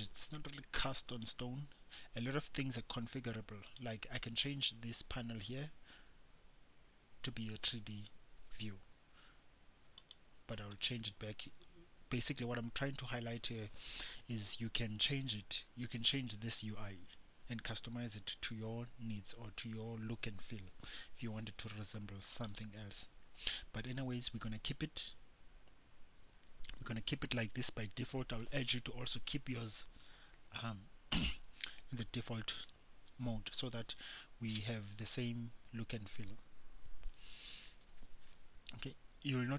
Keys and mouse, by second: 1.3-27.2 drag.